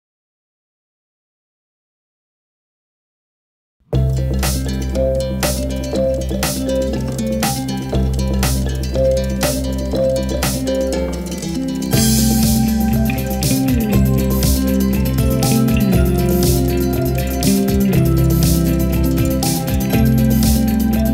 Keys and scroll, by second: 0.1 g, 0.2 x, 1.9 g, 2.1 y, 14.0 ctrl+m, 14.3 Escape, 14.5 ctrl+j, 19.8 shift+a.